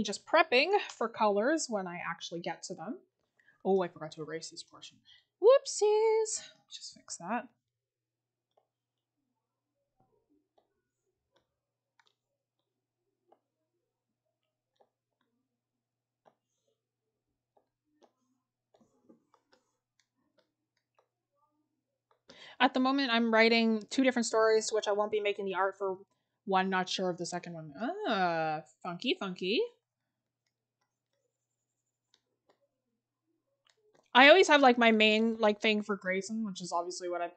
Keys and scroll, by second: 19.3 scroll, 22.1-22.4 scroll, 35.4-36.0 scroll down 1, 36.0 scroll up 1.